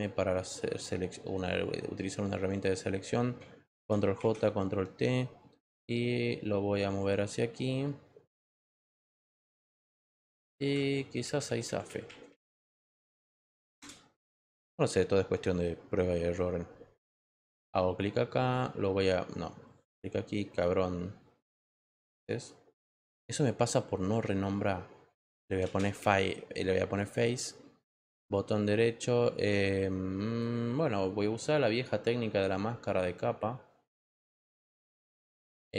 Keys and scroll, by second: 3.7 ctrl+j, 4.1 ctrl+t, 13.7 Return, 17.0 v, 25.1-26.4 typing.